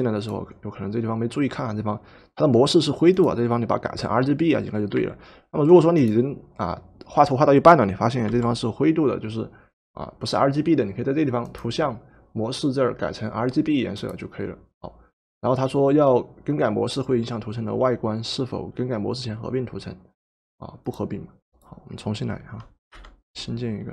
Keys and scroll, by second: 5.0 Escape, 8.3 v, 22.9 Delete.